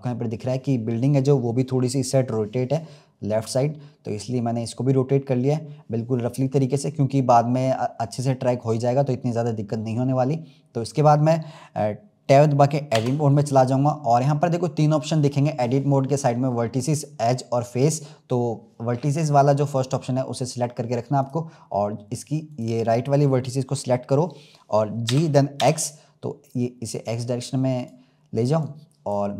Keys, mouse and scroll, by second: 0.2-0.9 scroll down 1, 0.9-1.7 scroll down 1, 1.7-2.4 scroll down 1, 2.8-4.0 scroll up 3, 4.0 scroll up 1, 4.2-4.8 scroll down 1, 4.8 scroll up 1, 5.4 scroll up 1, 9.2-9.7 scroll down 1, 9.7-10.1 scroll up 1, 10.5-11.0 scroll down 1, 12.9 Tab, 13.6-14.9 scroll up 1, 21.1 click, 22.4 click, 25.0 g, 28.5-29.3 drag.